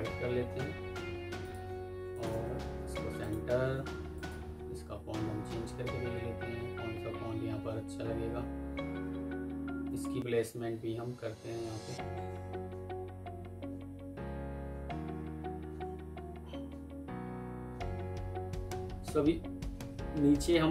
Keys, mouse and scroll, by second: 2.0 shift+click, 2.8 Escape, 8.1 Down, 8.3 Down, 8.8 Down, 9.2 Down, 9.4 Down, 9.8 Up, 10.0 Up, 10.7 Down, 11.4 Up, 11.6 Up, 11.8 Down, 12.0 Down, 13.3 Down, 13.4 Down, 13.9 Down, 14.0 Down, 14.7 Down, 15.7 Down, 16.1 Down, 17.0-18.3 Down, 19.8 Down.